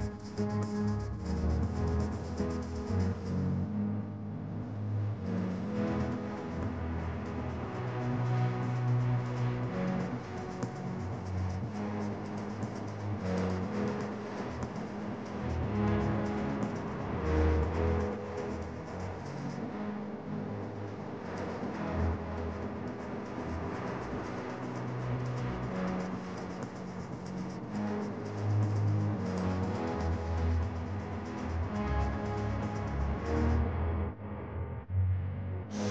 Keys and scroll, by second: 1.4 space, 4.4 space, 5.3 space, 6.3 space, 9.3 space, 12.9 space, 14.1 space, 15.8 space, 18.9 space, 20.0 space, 22.6 space, 24.5 space, 26.6 space, 29.0 space, 29.7 space, 31.5 space, 32.1 space, 35.1 space.